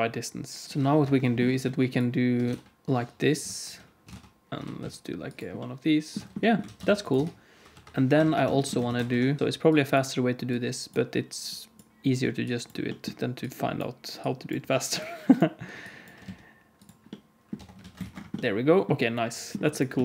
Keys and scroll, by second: 0.6 alt+a, 0.6 ctrl+s, 0.6 Tab, 0.6 alt+z, 0.9 KP_7, 2.4 e, 4.0 e, 4.5 alt+z, 6.1 Tab, 6.6 alt+a, 6.8 ctrl+s, 7.1 Tab, 7.6 KP_7, 8.1 alt+a, 8.8 ctrl+s, 9.0 3, 16.1 x, 17.5 Tab, 17.7 alt+a, 18.0 ctrl+s, 18.9 s.